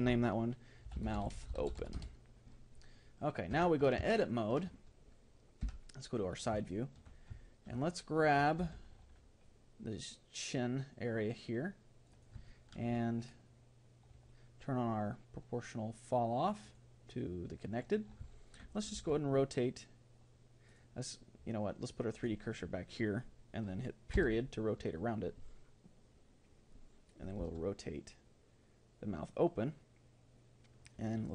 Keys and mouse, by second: 3.5 Tab, 4.3-6.3 middle drag, 5.6 KP_3, 6.7-9.5 middle drag, 8.3 a, 8.6 c, 12.5-16.6 middle drag, 16.6-18.3 drag, 18.3-20.0 middle drag, 19.0 r, 22.1-23.7 drag, 24.1 ., 27.4 r.